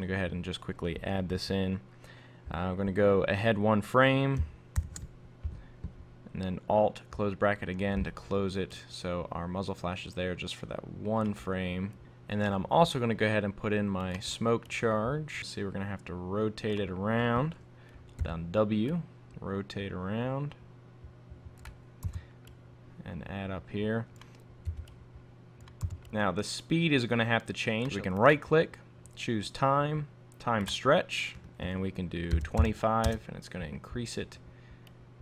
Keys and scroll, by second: 4.8 alt+[, 19.8 w, 23.8 v, 33.1 Return.